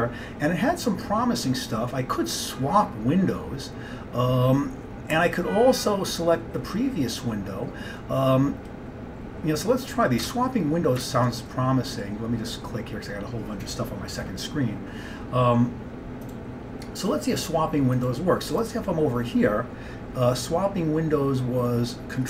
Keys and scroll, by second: 10.3 alt+Tab, 11.1 alt+Tab.